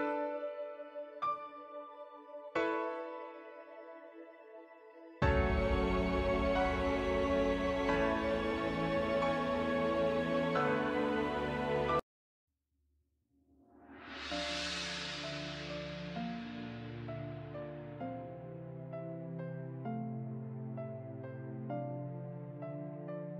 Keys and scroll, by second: 3.1 ctrl+-, 3.5 ctrl+-, 9.3 ctrl+-.